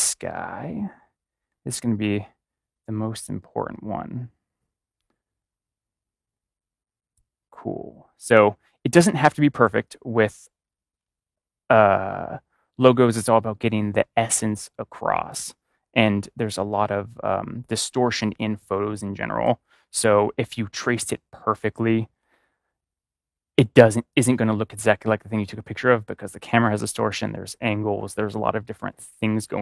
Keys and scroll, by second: 9.4 ctrl+=.